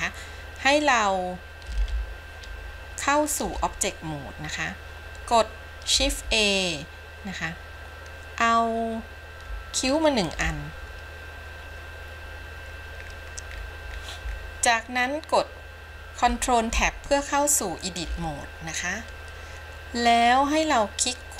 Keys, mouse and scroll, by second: 2.0 ctrl+Tab, 6.4 shift+a, 13.0-15.7 scroll down 10, 16.8 ctrl+Tab.